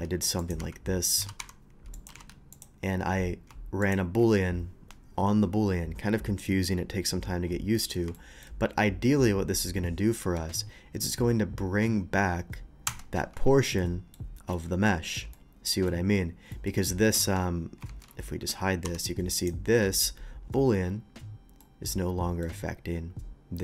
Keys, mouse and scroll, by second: 0.0-2.5 typing, 0.4 click, 1.1 click, 1.9 click, 2.5 click, 3.8 shift+click, 7.7 middle drag, 8.1-8.4 shift+middle drag, 10.3 ctrl+click, 12.9 ctrl+KP_Subtract, 13.8-14.1 middle drag, 14.5 middle click, 15.3-15.9 middle drag, 16.5 middle click, 17.2 shift+2, 17.9 ctrl+z, 18.8 h, 19.4 click, 21.6-22.4 middle drag.